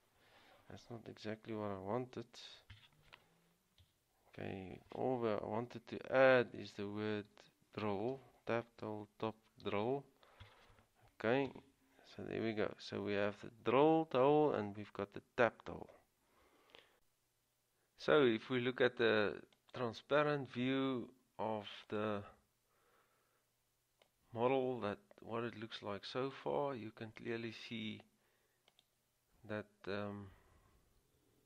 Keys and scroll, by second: 2.2 ctrl+z, 3.8-4.5 typing, 6.5-10.5 typing, 11.7 Return, 15.7-16.4 typing.